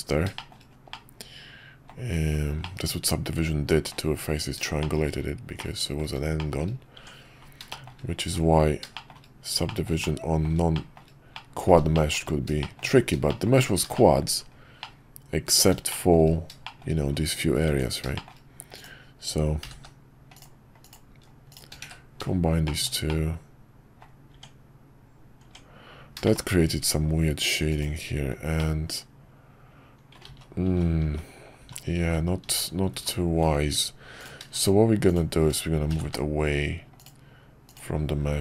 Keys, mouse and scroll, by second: 0.3 shift+middle drag, 0.9-1.9 middle drag, 2.6-3.9 middle drag, 4.8 shift+middle drag, 5.5-6.0 middle drag, 6.4 shift+middle click, 6.9 Tab, 7.7 middle click, 8.9 middle click, 9.6 middle click, 10.0-10.5 middle drag, 10.7 middle click, 11.3 middle drag, 11.9 shift+middle drag, 12.6 shift+middle drag, 13.3 shift+middle drag, 13.9 shift+middle drag, 14.8-15.6 middle drag, 15.9 shift+middle click, 16.6 shift+middle click, 17.7 Tab, 18.1 shift+middle click, 18.8 click, 19.6 g, 20.9 click, 21.5 shift+click, 21.9 1, 22.6 shift+middle click, 22.9 shift+scroll down 1, 23.1 middle click, 24.0 scroll down 1, 24.3 Tab, 26.3 shift+middle click, 27.7 click, 28.6-30.1 middle drag, 30.3-33.4 ctrl+z, 34.2 click, 34.6 shift+click, 35.9 g.